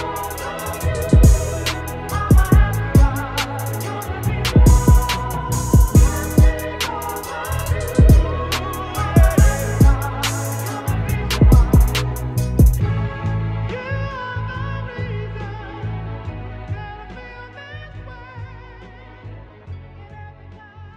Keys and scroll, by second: 10.8 ctrl+z, 10.9 ctrl+z, 18.7 ].